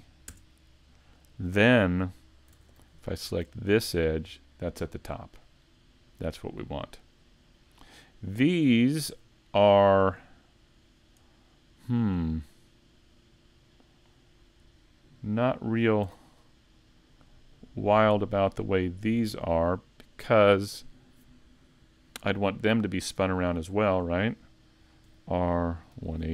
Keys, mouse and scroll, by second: 17.2 right click, 20.3 right click, 20.3 click.